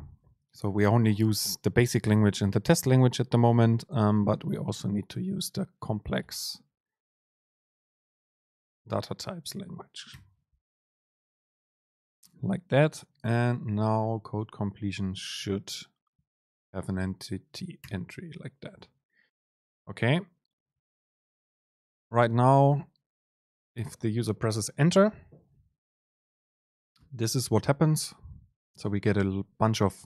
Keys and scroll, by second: 15.5 super+space, 18.9 Down, 20.6 Return, 28.8 shift+Up.